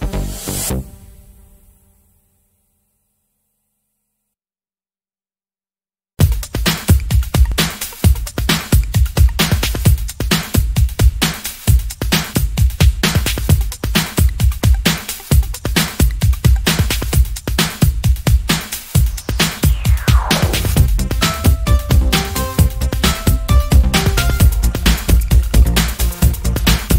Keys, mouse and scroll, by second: 0.1 KP_Enter, 2.4 click, 4.6 click, 5.6 click, 6.4-7.0 ctrl+scroll up 2, 7.2 ctrl+click, 8.8 ctrl+click, 10.0 ctrl+click, 10.7-11.1 ctrl+scroll down 2, 11.4 ctrl+click, 11.9 ctrl+middle click, 13.6 click, 14.8 ctrl+shift+click, 16.4 ctrl+shift+click, 17.1-17.6 ctrl+shift+scroll up 2, 18.2-20.6 ctrl+drag, 21.5-23.1 drag, 23.8 click, 25.0 ctrl+shift+click, 26.2 ctrl+shift+click.